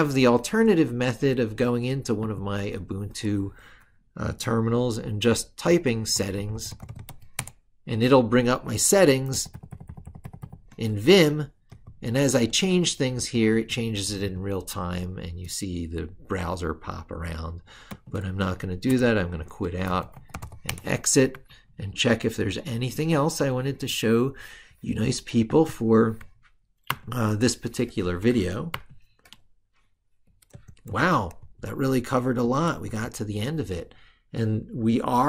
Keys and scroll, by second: 9.2 ctrl+-, 11.7 ctrl+f, 21.2 ctrl+super+Left, 22.2 ctrl+super+Right, 26.7 ctrl+super+Left.